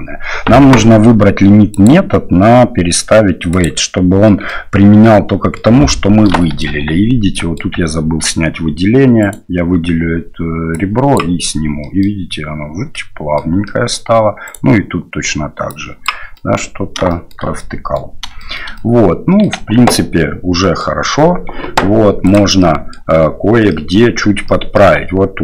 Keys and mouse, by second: 1.9-3.7 drag, 4.2 middle drag, 5.0-5.6 middle drag, 6.4 shift+middle drag, 7.3 middle drag, 7.8 Tab, 9.2 right click, 10.8 click, 11.8 middle click, 12.9 middle click, 13.6 middle click, 14.4 right click, 15.7 click, 16.3 middle click, 17.1 shift+middle click, 17.6 middle click, 18.4 shift+middle click, 18.7 middle click, 19.6 Tab, 19.9 middle click, 21.8 q, 22.6 middle click, 23.7 middle click, 24.5 middle click, 25.0 Tab.